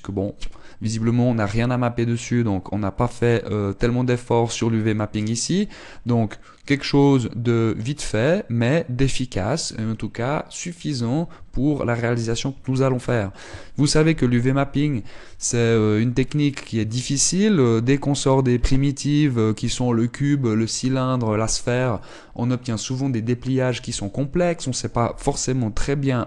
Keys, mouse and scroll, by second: 11.9 Tab, 16.9-17.3 scroll up 2, 17.5 shift+middle click, 19.0 middle click.